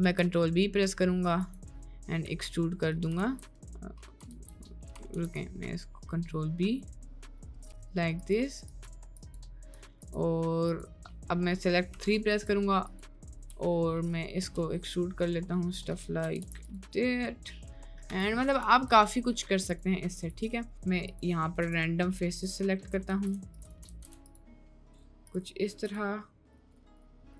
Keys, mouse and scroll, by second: 0.0 ctrl+b, 2.0 middle click, 2.3 e, 3.2 ctrl+z, 3.8 middle click, 4.3 ctrl+z, 5.1 ctrl+b, 11.9 3, 12.3 click, 12.9 click, 14.4 e, 16.2 g, 16.9 Tab, 17.5 middle click, 18.2 click, 18.6 middle click, 18.6 Tab, 19.1 middle click, 19.8 click, 21.1 shift+click, 21.6 shift+click, 22.5 shift+click, 23.1 z, 24.0 ctrl+z, 24.2 shift+click, 25.9 click, 26.5 shift+click.